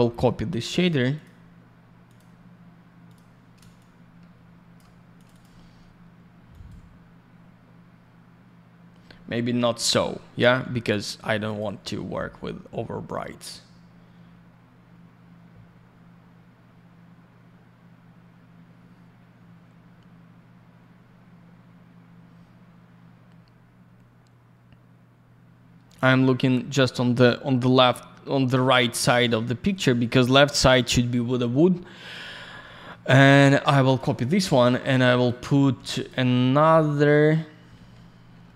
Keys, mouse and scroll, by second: 0.0 middle click, 0.2 middle click, 0.5 scroll up 1, 1.1 click, 1.2 click, 2.0 click, 2.1 click, 3.1 click, 3.7 shift+click, 5.1 click, 5.2 click, 5.3 click, 5.4 double click, 6.5 click, 6.6 click, 11.4 click, 11.5 click, 13.0 click, 32.0 click, 32.1 click, 32.3 scroll down 1, 32.6 middle click, 33.4 shift+click, 34.8 click, 35.7 q, 35.9 click, 36.0 click, 37.7 alt+й, 38.4 alt+middle click.